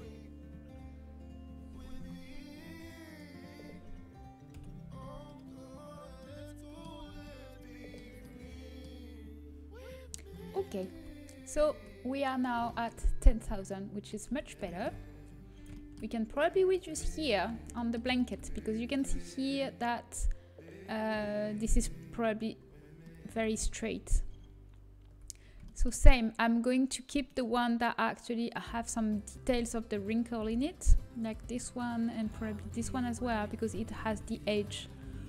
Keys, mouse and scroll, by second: 2.9-4.4 middle drag, 4.4 KP_Decimal, 4.9 z, 6.9 z, 10.8 a, 11.6 Tab, 14.9 Tab, 18.4-22.9 middle drag, 27.2 right click, 32.2-34.0 drag.